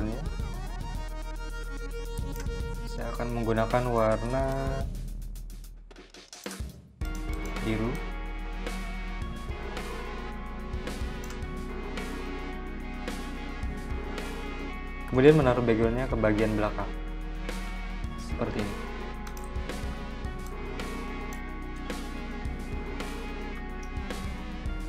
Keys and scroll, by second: 16.4 shift+super+{, 17.4 v, 19.4 z, 21.0 v.